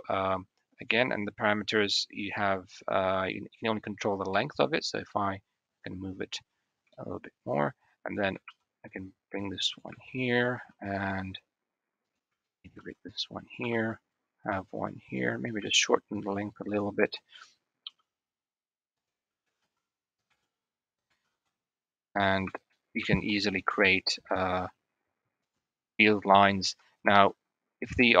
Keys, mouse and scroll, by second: 4.3-6.1 shift+middle drag, 6.7-7.0 shift+middle drag, 8.3 shift+d, 9.9-10.3 shift+middle drag, 10.5 shift+d, 12.1-12.6 shift+middle drag, 12.8 shift+d, 13.7 shift+d, 15.9-16.7 shift+drag, 17.6 g, 19.6 shift+d, 20.2 shift+d, 21.0 shift+d, 22.4 shift+click, 23.0 shift+d, 26.1 shift+middle click, 27.0 shift+d.